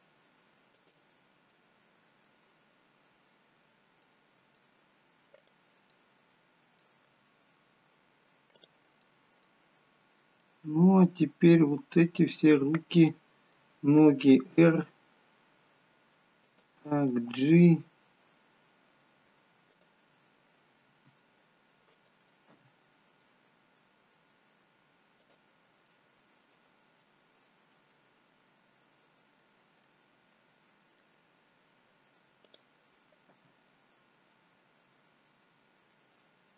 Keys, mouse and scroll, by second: 1.5 middle click, 3.2-3.6 scroll up 2, 3.6-4.5 scroll down 3, 4.1 middle click, 5.4 click, 6.0 middle click, 7.2-8.3 scroll up 2, 8.6 click, 9.1 middle click, 11.6 middle click, 12.1 click, 13.0 middle click, 14.4 r, 17.3 g, 20.9 r, 22.7 g, 25.9 middle click, 27.0 middle click, 32.5 middle click, 32.5 click, 33.5 g.